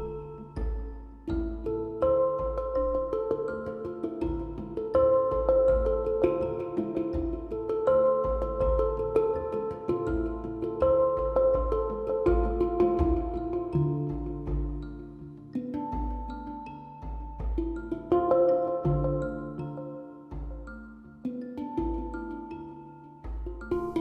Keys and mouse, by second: 1.0 z, 4.2 middle click, 4.5 z, 5.0 z, 6.4-7.8 typing, 9.7 z, 12.1 middle click, 12.8 middle click, 13.5 middle click, 13.9 middle click, 14.3 z, 14.5 z, 16.5 a, 18.8 a, 19.2 ctrl+z, 21.3 click, 23.2 click.